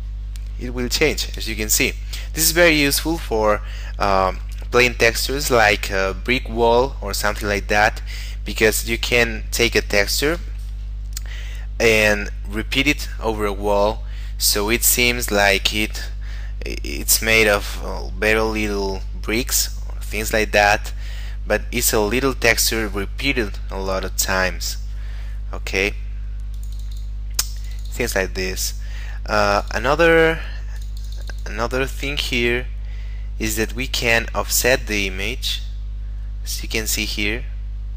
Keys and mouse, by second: 1.4 Escape, 26.5 click, 32.6 middle click, 34.9 click.